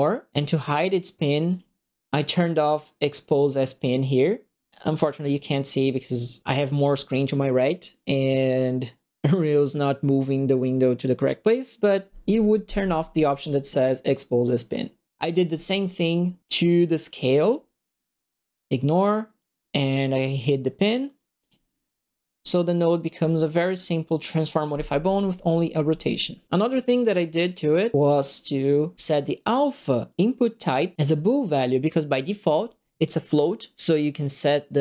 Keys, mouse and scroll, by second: 1.4 click, 17.1 click, 20.1 click, 21.3 click, 27.9 middle click, 28.1-28.9 scroll down 8.